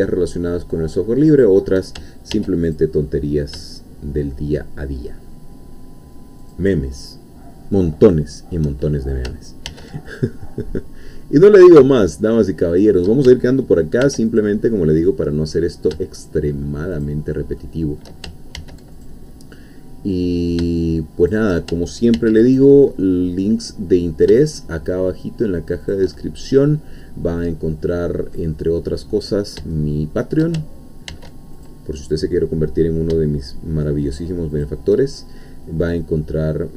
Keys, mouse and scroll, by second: 1.3 shift+click, 2.3 ctrl+r, 2.8 ctrl+click, 6.4 shift+click, 7.8 shift+middle click, 9.7 ctrl+r, 10.1 ctrl+click, 12.7 shift+click, 14.0 ctrl+r, 14.4 ctrl+click, 17.0 shift+click, 17.6 shift+middle click, 18.6 ctrl+r, 19.0 ctrl+click, 21.2 shift+click, 22.2 ctrl+r, 22.5 ctrl+click, 25.8 shift+click, 26.2-29.6 shift+middle drag, 29.7 shift+middle click, 31.1 ctrl+r, 31.6 ctrl+click, 34.5 shift+click, 35.4-36.5 middle drag, 36.5 scroll down 2.